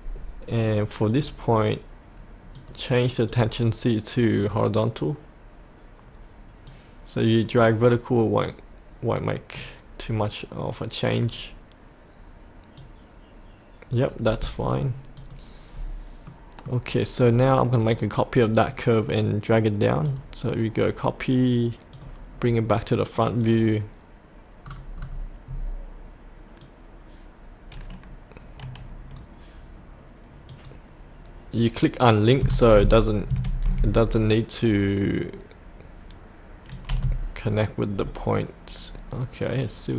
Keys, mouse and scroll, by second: 0.6-8.2 drag, 8.3-14.4 drag, 15.7-16.3 scroll up 1, 16.3 middle click, 17.2-18.6 scroll down 1, 18.6 click, 22.3-23.4 scroll down 1, 23.4 click, 24.6-25.5 scroll down 1, 26.6-31.6 drag, 36.7-39.9 drag.